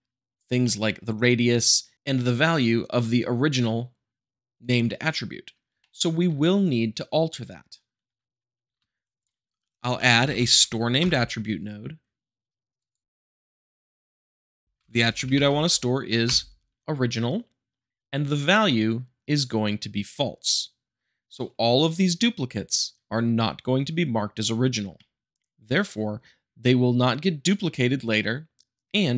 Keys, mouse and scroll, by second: 0.6-1.6 middle drag, 5.8-6.8 shift+middle drag, 7.5-8.2 scroll up 2, 8.2-8.7 middle drag, 8.7 shift+a, 9.2 click, 9.9-10.3 typing, 12.7 click, 13.4 click, 13.7 click, 14.2 click, 14.5-15.4 typing, 16.2 Return, 24.9-26.0 shift+middle drag.